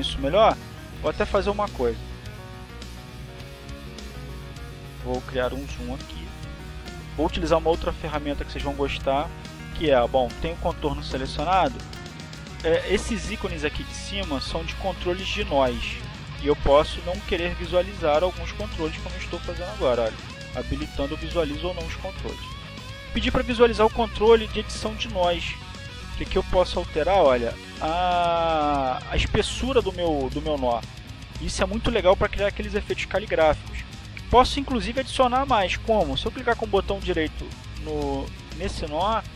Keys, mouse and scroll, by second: 4.1 click, 5.2 click, 6.7 click, 8.3 click, 11.1 click, 20.3 click, 21.1 click, 21.6 click, 22.7 click, 23.2 click, 23.7 click, 24.4 click, 25.5 click, 28.0 click, 29.6 click, 30.9-32.0 drag.